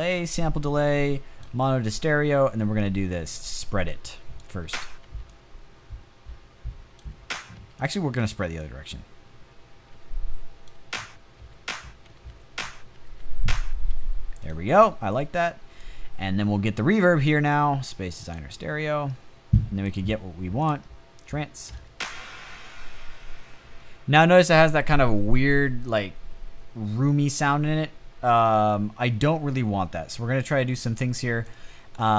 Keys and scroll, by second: 3.9 space, 4.5 space, 6.5 space, 7.0 space, 9.4-13.4 typing, 21.2 space, 23.3 space.